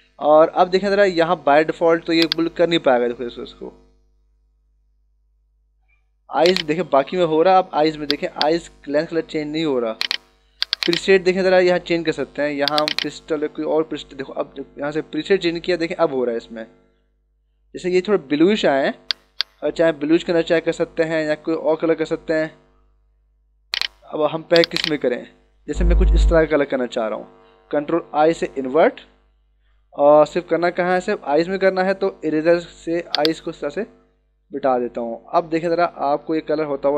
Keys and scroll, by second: 28.1 ctrl+i, 30.2 ctrl+=, 32.8 e.